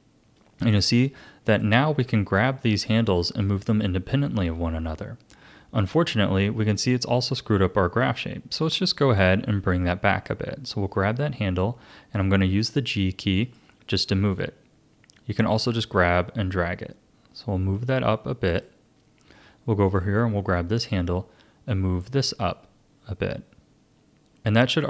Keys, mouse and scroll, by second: 1.5 click, 2.4 r, 9.4 g, 14.3-17.3 drag, 19.8 click, 20.8 click, 21.7-24.7 drag.